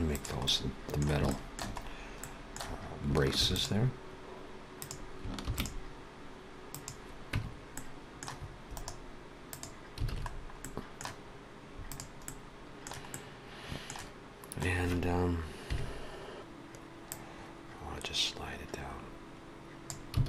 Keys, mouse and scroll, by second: 0.4 middle click, 1.3 shift+middle click, 1.7-3.0 scroll up 2, 2.2 middle click, 3.3 ctrl+r, 5.4 ctrl+r, 7.3 Tab, 7.7 middle click, 8.7 right click, 10.0 alt+a, 10.2-10.9 scroll down 3, 10.6 middle click, 11.8 click, 12.2 middle click, 13.1 middle click, 15.5 KP_3, 17.0 click, 20.2 alt+a.